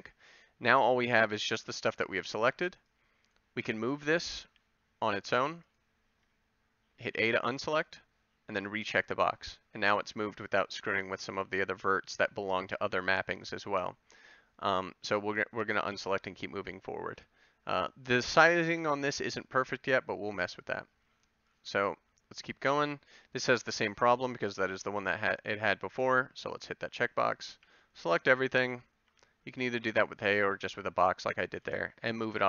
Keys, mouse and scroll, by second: 2.5 b, 4.4 g, 5.9-7.1 drag, 7.1 a, 15.9 a, 27.5 b, 29.1 g, 32.2 a.